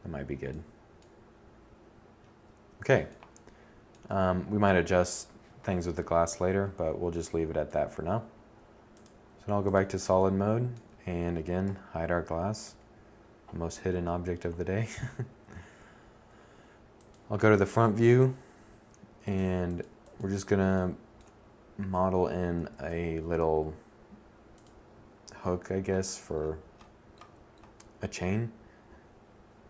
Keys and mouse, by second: 10.2 h, 11.1 1, 12.3 KP_7, 13.9 KP_1, 21.3 shift+a.